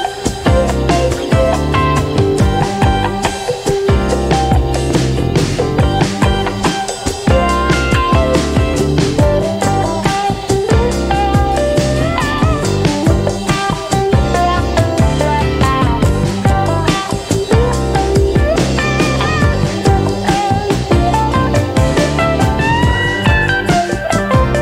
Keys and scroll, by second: 0.0-0.5 typing, 7.2 4, 10.9 a, 20.3 v.